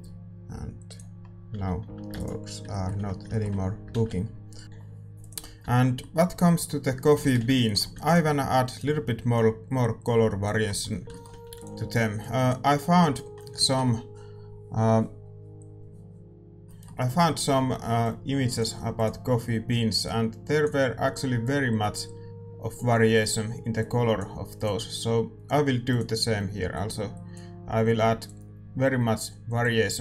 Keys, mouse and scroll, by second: 0.8-2.6 drag, 0.8 KP_Decimal, 2.3 ctrl+s, 2.3 a, 2.6-4.6 middle drag, 4.6-7.3 drag, 6.0-10.0 middle drag, 7.3 shift+z, 8.7 ctrl+s, 8.7-30.0 drag, 10.0-30.0 right drag.